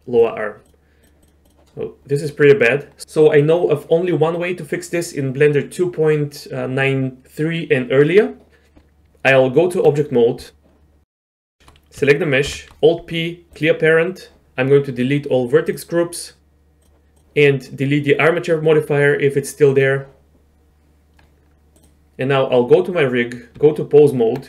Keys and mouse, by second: 0.6-1.0 drag, 1.2-1.7 drag, 1.7-2.2 middle drag, 6.8-9.0 middle drag, 9.0 Tab, 10.5 middle click, 12.4 alt+p, 15.7-16.8 middle drag, 17.1 drag, 23.6 Tab.